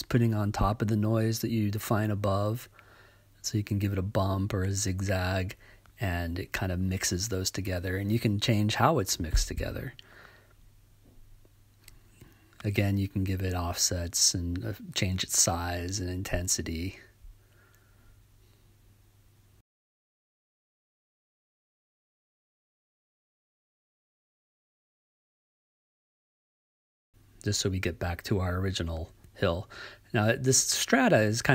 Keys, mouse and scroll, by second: 1.8-3.0 right drag, 6.6-9.9 drag, 13.9 click, 14.6 click, 17.2-20.1 drag, 21.8-23.6 drag, 25.1 right click, 30.9-31.5 drag.